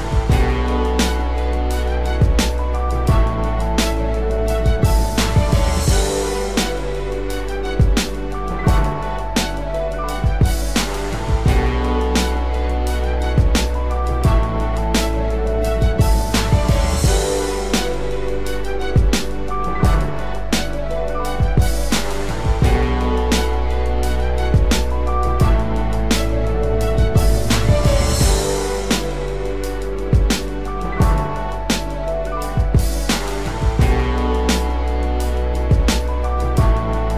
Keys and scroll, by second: 16.5 ctrl+t, 17.9 ctrl+t, 25.7 ctrl+=, 25.9 ctrl+space, 30.9 ctrl+z, 33.6 ctrl+t.